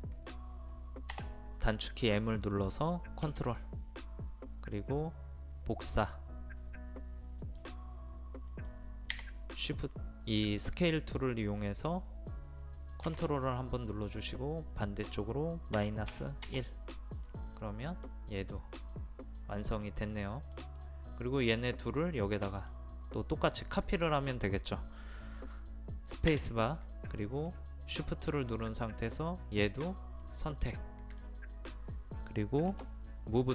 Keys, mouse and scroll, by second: 1.1 m, 3.4 click, 8.5 middle click, 13.9-15.0 drag, 16.1 KP_1, 17.3-20.0 middle drag, 27.0 space, 29.6 shift+click, 30.2-32.0 middle drag, 32.7 m.